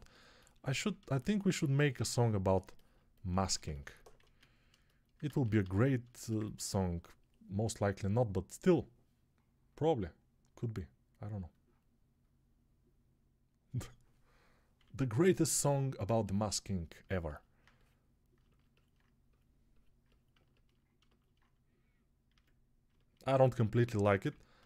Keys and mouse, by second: 4.1 a, 5.1 ctrl+z, 5.5 a, 14.7-17.0 right drag, 14.7-15.9 ].